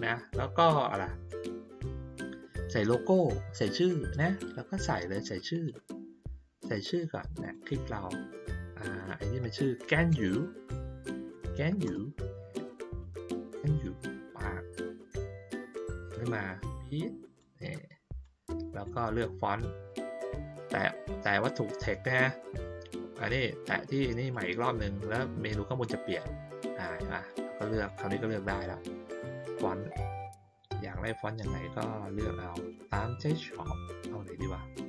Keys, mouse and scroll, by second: 5.5 click, 7.4 click, 13.8 click, 16.1-17.3 drag, 18.2 click, 24.3 click, 27.8 click.